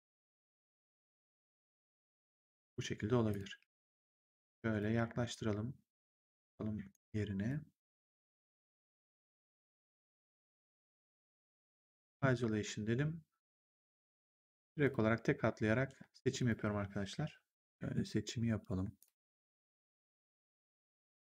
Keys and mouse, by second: 3.2 click, 3.5 w, 4.1 click, 6.1 click, 7.4 click, 8.9 click, 10.4 click, 11.3 ctrl+1, 13.5 right click, 14.1 click, 14.7 shift+click, 16.3 shift+click, 17.6 shift+click, 18.9 shift+click, 20.7 shift+click.